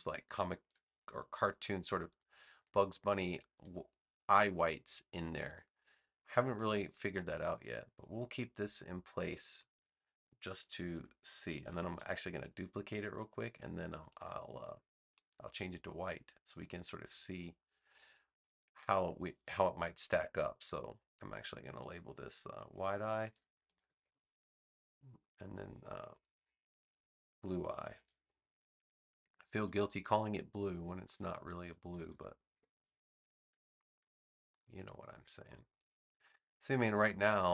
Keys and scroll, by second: 5.2 space, 11.5 super+j, 22.6-24.1 typing, 28.9-30.1 typing, 31.2 space, 31.9 e, 32.5 Return.